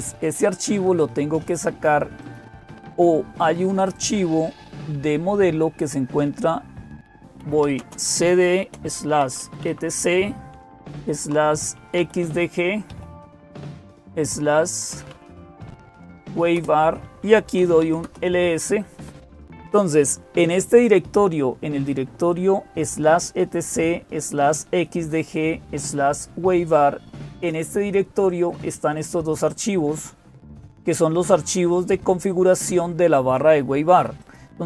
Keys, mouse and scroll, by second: 0.0-34.6 typing, 2.0 click, 3.7 click, 25.7-28.2 drag, 28.8-32.2 drag, 34.0 click.